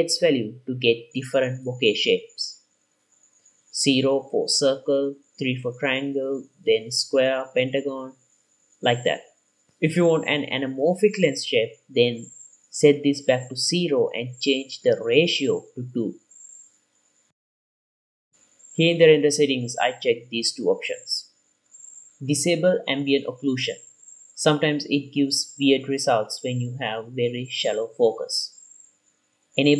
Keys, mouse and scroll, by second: 0.0-0.9 drag, 1.5-2.0 scroll up 1, 3.8 click, 5.3-5.7 scroll up 1, 5.7-6.0 scroll down 1, 6.0-6.4 scroll down 1, 7.3 click, 8.6-9.3 drag, 9.5 click, 10.7-11.3 scroll down 2, 11.3 scroll down 1, 12.0 click, 14.2-15.3 drag, 16.7-19.3 drag, 19.8 click, 20.6 click, 23.6 click, 24.7 drag, 25.2-26.0 drag, 26.2 click, 28.1 click, 28.9-29.7 drag.